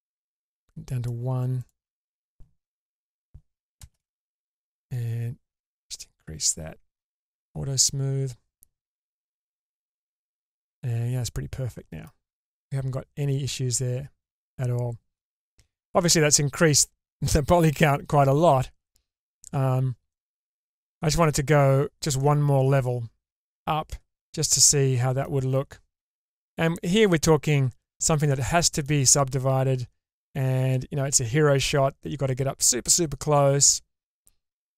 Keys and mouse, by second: 1.6 click, 3.8 shift+space, 5.6-7.5 drag, 9.1-12.0 middle drag, 14.5-15.1 middle drag, 15.8 Tab, 17.1 middle click, 20.1-21.1 middle drag, 22.2-25.2 middle drag, 26.1 Tab, 28.3-28.8 shift+middle drag, 30.7 middle click.